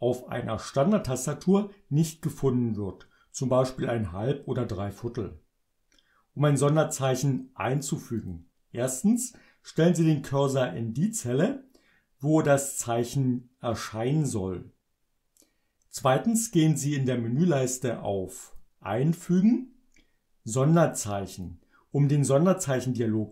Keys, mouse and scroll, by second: 8.2 click, 18.4 click, 21.3 click.